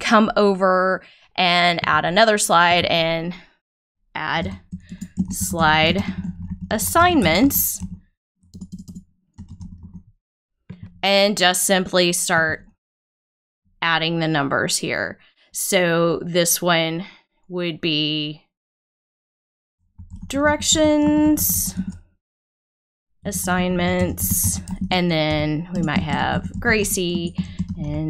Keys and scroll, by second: 4.8-7.2 typing, 8.5 BackSpace, 9.3 e, 10.8 s, 19.7-20.6 typing, 21.7 Return, 23.0-28.0 typing, 27.1 Return.